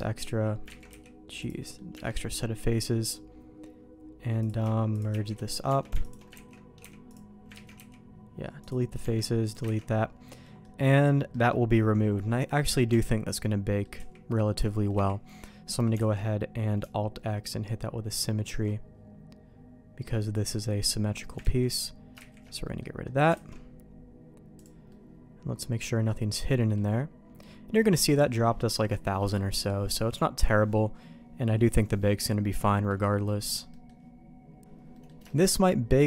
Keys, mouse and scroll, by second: 0.6 x, 0.7 ctrl+z, 0.9 x, 1.6 middle click, 2.6 Tab, 4.4 click, 4.9 shift+click, 5.1 shift+1, 5.6 Tab, 6.0 alt+click, 6.3 ctrl+x, 7.5 ctrl+z, 7.7 x, 9.0 Tab, 9.4 click, 9.7 ctrl+x, 10.4 middle click, 11.3 middle click, 12.9 Tab, 13.3 middle click, 13.9 z, 14.2 middle click, 14.9 z, 15.7 middle click, 16.1 alt+x, 20.3-21.3 drag, 21.4 ctrl+z, 22.2 ctrl+shift+z, 22.6 middle click, 23.3 alt+a, 24.5 click, 24.8-26.0 middle drag, 26.6 middle click, 29.1 middle click, 30.3 middle click, 31.9 middle click, 32.6 middle click, 33.1 middle click, 33.7 middle click, 34.9 middle click, 35.2 shift+middle click.